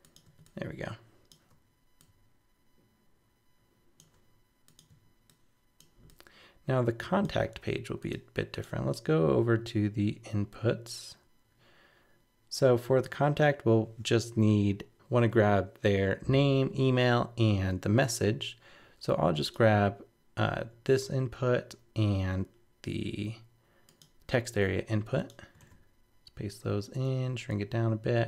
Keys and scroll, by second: 24.6 super+c, 25.6 super+v.